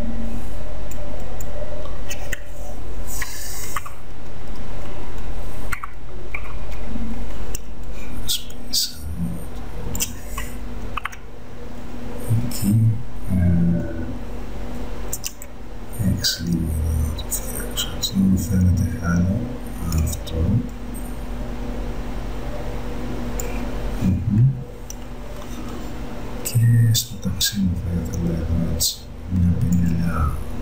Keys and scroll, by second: 3.9 ctrl+=, 7.6 space, 11.0 ctrl+-, 15.3 x, 26.5 space.